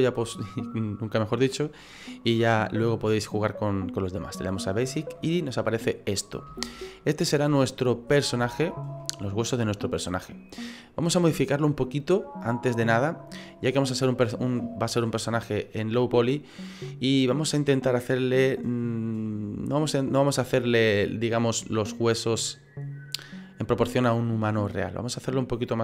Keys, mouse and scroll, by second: 5.2 middle click, 6.0-6.5 scroll up 5, 6.6 shift+middle click, 6.9 shift+scroll up 1, 7.0 middle click, 8.1-8.4 scroll up 4, 8.4 shift+middle click, 9.1 middle click.